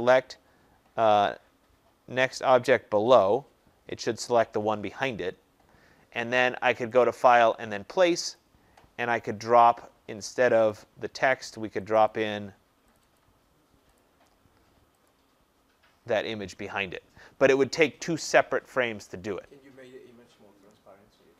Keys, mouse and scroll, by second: 3.1 click, 7.0 click, 8.3 click, 10.7 click, 12.1 click, 12.9 click, 13.1 click, 13.9 click, 15.0 click.